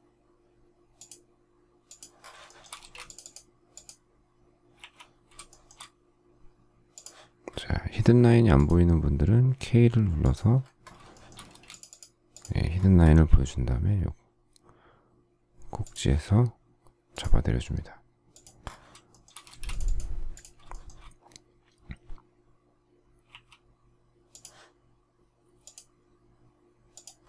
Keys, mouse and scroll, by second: 2.4 shift+middle click, 2.7 space, 5.4 shift+middle click, 11.1 shift+middle click, 11.4 space, 19.1 shift+middle click, 19.4 space, 20.7 shift+middle click.